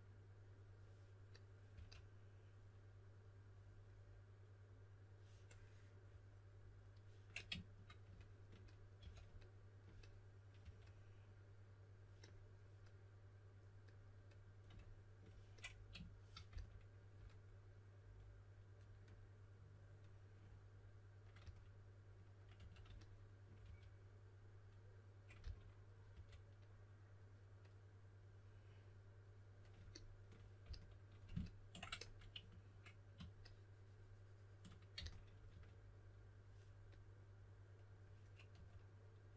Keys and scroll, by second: 1.7 typing, 9.0 2, 10.6 2, 16.4 s, 21.4-23.6 typing, 25.1-26.1 typing, 30.6 s, 34.9-36.0 typing, 38.5 typing.